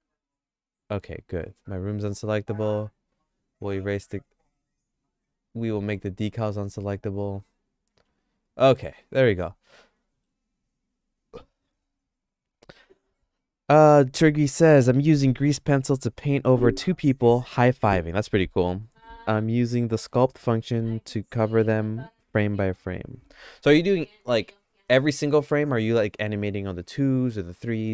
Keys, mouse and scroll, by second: 0.2 click, 1.9 click, 3.2 x, 4.0 x, 7.9 x, 8.4 middle click, 8.7 shift+middle click, 9.1-10.2 shift+middle drag.